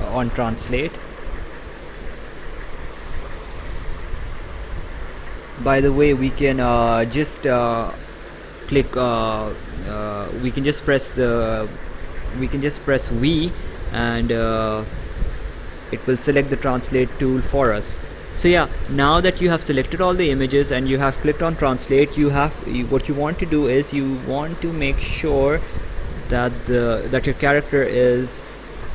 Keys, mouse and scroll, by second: 0.1 click, 1.8 right click, 3.8 v, 5.2 v, 6.1 c, 6.7 v, 7.9 right click, 11.0 v, 12.5 v, 23.1 click, 27.1 click.